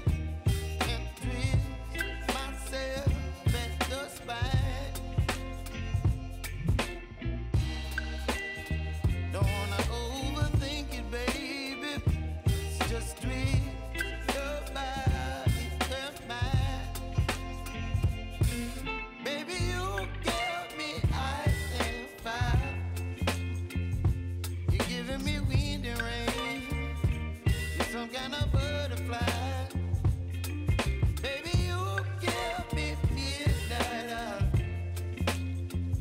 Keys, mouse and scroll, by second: 0.6 Down, 2.0 Right, 2.5 Down, 3.9 click, 4.7 Left, 7.2 click, 10.8 click, 11.5 shift+click, 13.7 click, 16.2 v, 18.5 click, 18.8 v, 19.5 click, 20.6 shift+click, 21.4 Left, 23.2 Up, 25.1-32.6 drag, 32.6 ctrl+alt+Home, 33.2 v, 33.8-36.0 drag.